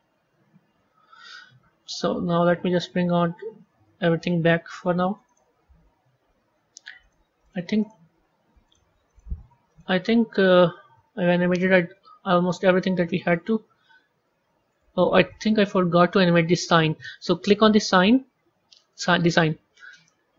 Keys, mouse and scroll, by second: 2.0 z, 2.5 click, 3.4 z, 5.2 click, 5.7-6.2 scroll up 7, 6.9 drag, 7.3 drag, 7.7 click, 8.6 click, 9.0 click, 9.6 click, 10.4-11.5 middle drag, 11.5 scroll up 4, 13.1-18.0 drag, 18.8 click.